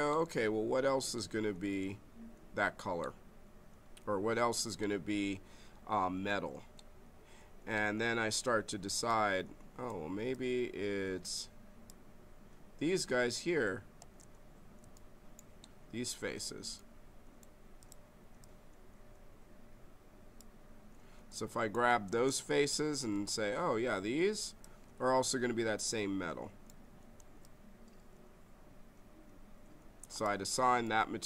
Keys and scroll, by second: 13.9 space, 22.1 space.